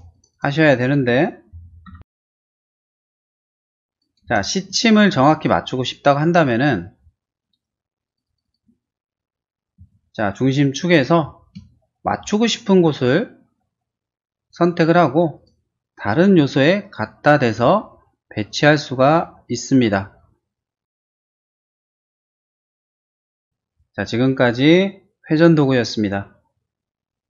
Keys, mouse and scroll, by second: 0.2 click, 0.4 click, 0.9 middle click, 1.7 middle click, 1.9 m, 2.3 click, 2.7 click, 3.1 p, 3.3 click, 4.0 click, 4.3 space, 4.4 scroll down 1, 4.9 middle click, 6.4 middle click, 7.0 scroll down 1, 7.7 scroll up 1, 8.1 click, 8.3 click, 8.5 click, 9.0-9.8 scroll down 3, 9.8 q, 10.8 click, 11.2 scroll down 1, 11.8 shift+middle click, 12.3 shift+middle click, 15.5 click, 21.7 click, 22.0 middle click, 22.3 shift+middle click, 22.8 shift+space.